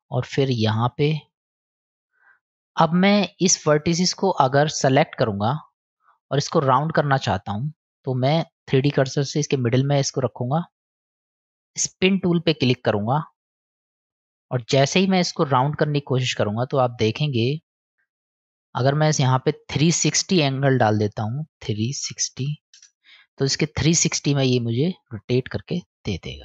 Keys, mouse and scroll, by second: 0.9 ctrl+click, 3.7 click, 4.2 click, 5.5-6.1 drag, 6.7-7.6 middle drag, 9.4 click, 10.1 middle click, 10.8 click, 11.3 KP_1, 12.2 click, 13.2-14.3 middle drag, 15.7-17.9 drag, 18.8 click, 19.6-23.2 drag, 24.5 middle click.